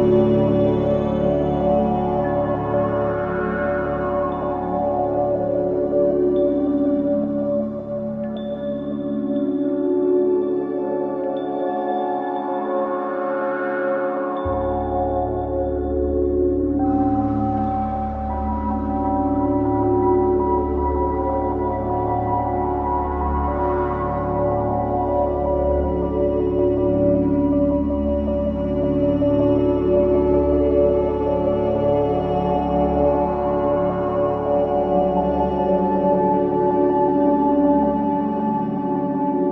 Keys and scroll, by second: 3.7 space, 10.3 space, 31.1 ctrl+c, 31.3 ctrl+v.